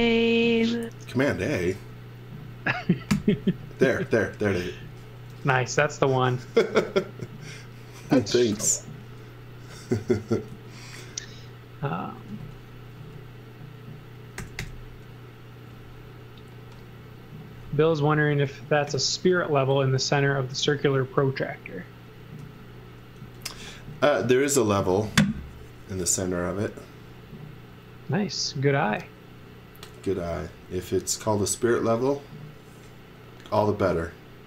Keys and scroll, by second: 3.1 super+s, 6.2-7.1 typing, 8.5 shift+5, 10.5 z, 11.0 x, 12.1 x, 12.4 v, 12.9 space, 14.1-15.0 typing, 18.8 p, 19.9 x, 20.6 z, 22.4 x, 23.2 z.